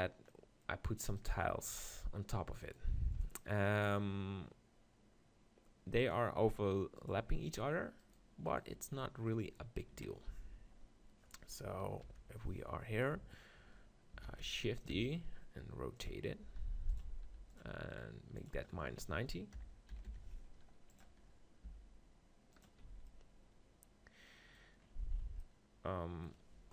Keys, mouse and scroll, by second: 1.2-4.5 right drag, 6.0 click, 7.0-10.4 right drag, 8.0 click, 9.9 KP_3, 10.4-11.6 middle drag, 10.4 z, 11.6 KP_4, 11.8 KP_4, 14.2 shift+d, 14.9 r, 16.6 g, 17.0-20.2 drag, 17.2 r, 21.2 middle click, 21.7 g, 22.6-24.1 drag, 22.8 z.